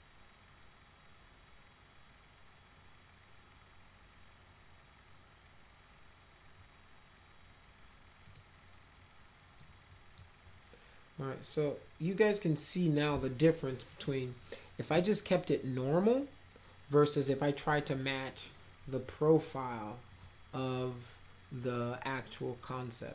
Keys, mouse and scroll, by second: 8.2 click, 9.6 middle click, 20.1 click.